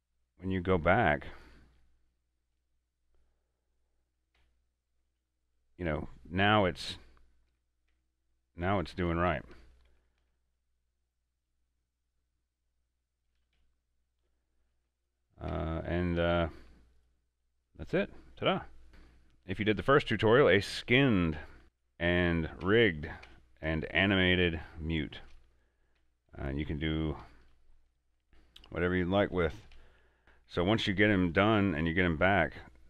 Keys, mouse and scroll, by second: 2.7 right click, 3.0-4.5 middle drag, 4.5 Tab, 5.2 shift+f, 5.4 shift+a, 6.6 shift+s, 7.6 Tab, 8.7 click, 9.1 Tab, 10.0 Tab, 10.3 alt+a, 13.4 alt+shift+a, 13.5 shift+f, 13.6 shift+d, 13.7 shift+s, 15.1 click, 15.6 Tab, 16.3 alt+a, 17.1 right click, 18.0 middle click, 19.2 shift+middle click, 19.7 scroll up 1, 20.3 shift+middle click, 20.8 scroll up 1, 20.9 middle click, 21.6 shift+d, 21.8 click, 22.7 Tab, 24.3 shift+f, 24.3 shift+s, 25.3 shift+click, 26.1 Tab, 26.8-27.1 middle drag, 27.3 scroll down 1, 27.5 shift+f, 27.6 shift+a, 27.9 shift+w, 29.2 d, 29.8 s, 30.2 Tab, 30.8 right click, 31.1 a, 31.4 right click, 32.3 Tab.